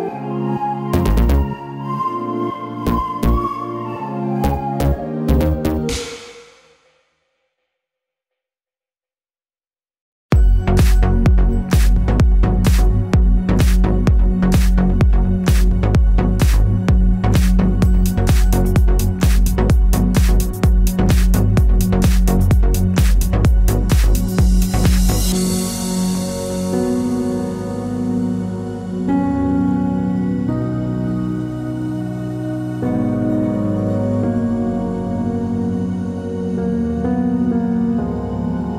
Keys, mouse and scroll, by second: 0.0-2.7 middle drag, 0.7-1.5 scroll down 2, 2.4 2, 2.7 click, 3.2 click, 3.8 shift+click, 4.1-7.4 middle drag, 7.4 click, 7.8 shift+click, 8.9 shift+click, 9.1-11.8 middle drag, 9.6 g, 11.8 click, 12.0-13.8 middle drag, 12.7-13.6 scroll up 2, 13.6 3, 13.8 click, 14.0 middle click, 14.9 shift+click, 15.2-20.9 middle drag, 15.3-15.8 scroll down 2, 15.8 g, 18.1 s, 20.9-23.3 drag, 22.3 s, 23.4-27.0 middle drag, 25.0 a, 25.6 l, 27.0 click, 27.1 Tab, 27.3-28.8 middle drag, 27.7 scroll down 1, 28.8 shift+d, 30.3 middle click, 31.2 scroll down 1, 31.5 shift+middle click, 32.2 ctrl+s, 35.1 Tab, 35.7 click, 35.9-38.7 middle drag, 36.1 Tab, 37.1 l.